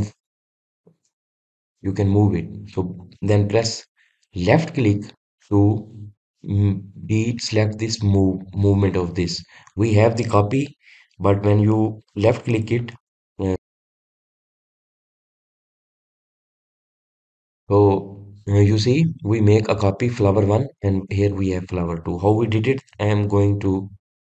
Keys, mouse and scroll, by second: 16.8 click, 17.5 drag, 22.7 click.